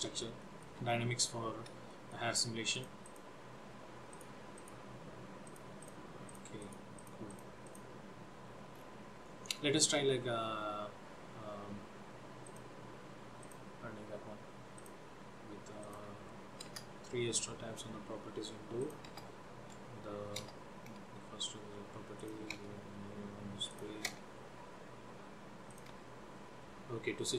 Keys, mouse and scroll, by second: 0.5 shift+middle click, 0.9-1.5 scroll up 3, 2.0 shift+middle click, 2.8 click, 3.1 click, 4.2 click, 4.7 click, 5.6 click, 5.9 click, 6.4 click, 6.7 click, 7.0 click, 7.4 click, 7.7 click, 8.8 scroll down 3, 9.3-10.4 scroll up 8, 10.4-10.8 scroll down 2, 12.5 click, 13.5 scroll, 14.8 click, 16.0 click, 16.8 Return, 18.9 click, 19.2 Return, 20.4 Return, 22.2 click, 22.6 Return, 23.8 click, 24.1 Return, 25.7 click, 26.0 Return.